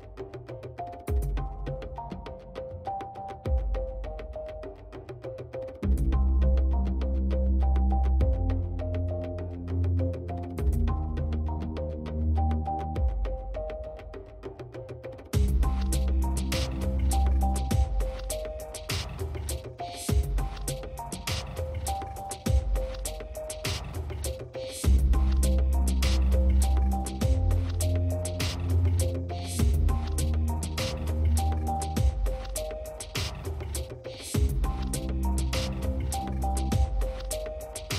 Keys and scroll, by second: 22.3 space, 24.2 space, 32.5 space.